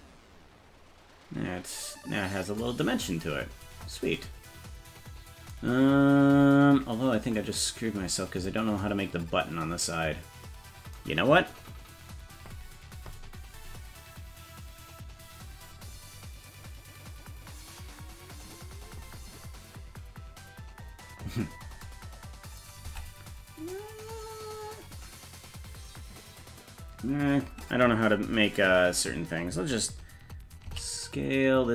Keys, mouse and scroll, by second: 22.9 Tab.